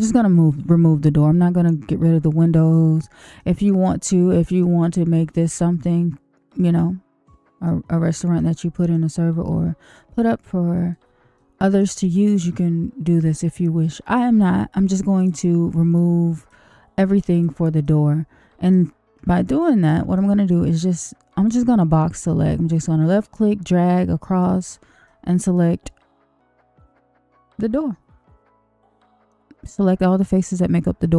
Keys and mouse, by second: 3.3 middle click, 4.3 middle click, 5.8-7.6 middle drag, 8.3 middle click, 10.4 middle click, 11.3 shift+middle click, 12.0 middle click, 15.1 click, 16.0 click, 17.3 click, 17.8 middle click, 19.4 shift+middle click, 20.1 middle click, 23.1-24.5 drag, 25.0-29.3 middle drag.